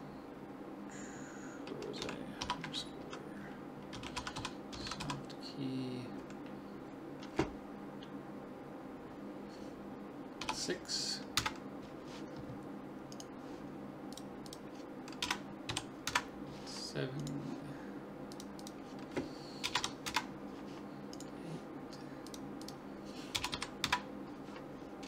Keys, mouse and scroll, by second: 13.1 right click, 14.1-15.8 drag, 17.2-18.9 drag, 18.3 right click, 19.1-20.2 drag, 20.2 middle click, 21.1-22.3 right drag, 23.0 click.